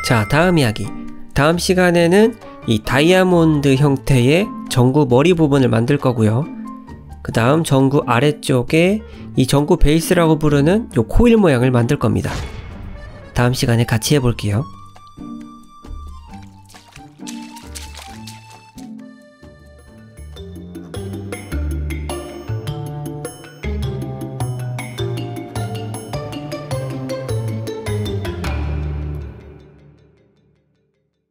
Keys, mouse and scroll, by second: 0.5-1.0 scroll down 4, 1.0 middle click, 5.5-6.2 scroll down 3, 6.1 shift+middle click, 7.6 click, 8.0 KP_Decimal, 8.2 middle click.